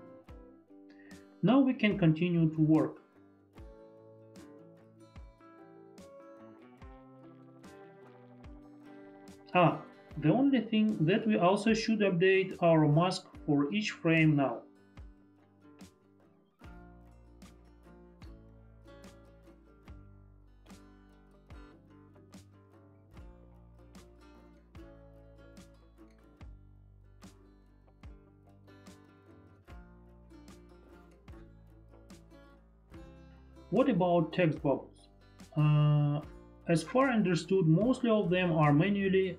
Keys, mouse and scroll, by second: 0.7 click, 2.0 ctrl+BackSpace, 2.0 click, 6.3 click, 13.6 Delete, 15.2 ctrl+shift+z, 15.7 click, 22.6 shift+F4, 23.5 shift+F4, 23.6 ctrl+d, 23.9 click, 24.3 F5, 24.6 ctrl+click, 25.0 ctrl+click, 25.3 ctrl+click, 26.0 click, 26.0 F5, 26.2 ctrl+click, 26.5 ctrl+click, 26.6 ctrl+click, 26.9 ctrl+click, 27.2 Return, 27.4 click, 27.5 F5, 28.0 ctrl+click, 28.2 ctrl+click, 28.6 Return, 37.0 click.